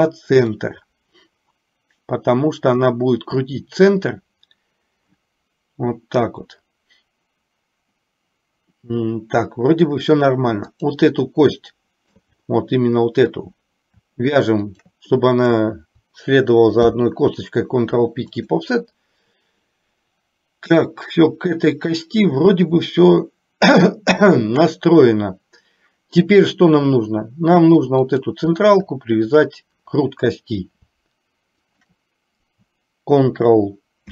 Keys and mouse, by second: 0.6 click, 1.6-4.0 drag, 11.7 shift+middle click, 14.8 shift+click, 16.8 ctrl+p, 28.1 click, 29.3 shift+click, 32.0 shift+click.